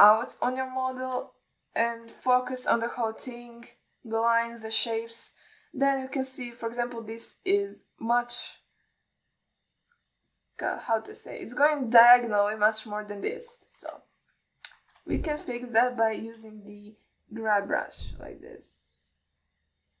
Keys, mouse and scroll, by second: 1.8 shift+middle click, 2.6 ctrl+middle click, 15.4 ctrl+alt+middle click, 16.4 alt+shift+middle click, 17.3 click, 19.0 click.